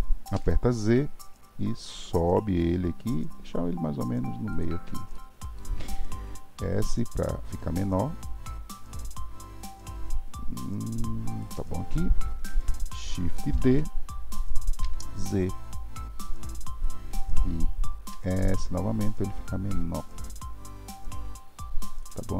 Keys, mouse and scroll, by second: 5.2-6.5 shift+middle drag, 6.5 s, 13.5 shift+d, 22.3 scroll up 1.